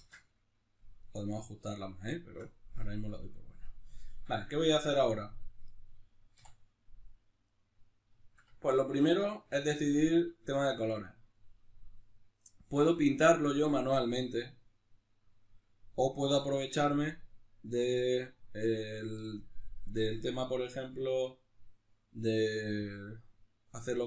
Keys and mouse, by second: 0.0 ctrl+space, 0.0-7.5 middle drag, 7.5 right click, 8.2-24.0 shift+middle drag.